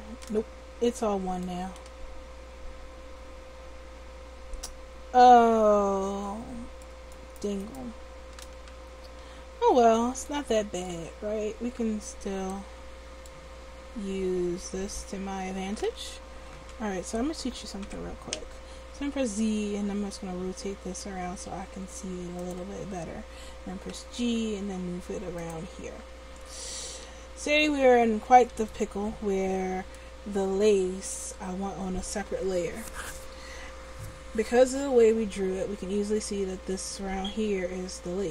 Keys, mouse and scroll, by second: 0.2 Tab, 0.9 Tab, 1.1 Tab, 7.2 right click, 8.1 Tab, 8.8 a, 9.2 a, 16.6 l, 17.8 r, 23.9 g, 27.1 a.